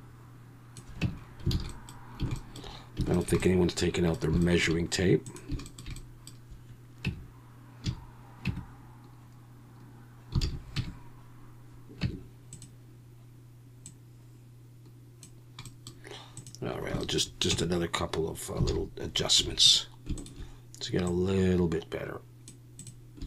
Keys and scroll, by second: 1.0 Tab, 1.5 alt+a, 7.0 Tab, 7.8 a, 8.5 Tab, 10.4 alt+a, 10.8 Tab, 12.0 Tab, 17.5 Tab, 18.7 alt+a, 19.4 3.